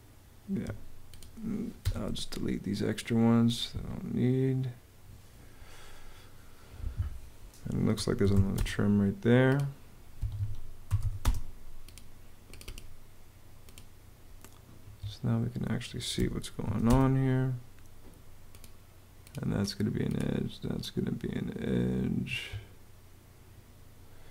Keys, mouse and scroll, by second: 0.3 Escape, 1.6 BackSpace, 3.5 BackSpace, 7.1-8.6 typing, 9.9 Escape, 10.4-11.3 typing, 14.6 Escape, 15.9 m, 16.4 a, 16.6 space, 22.0 Escape.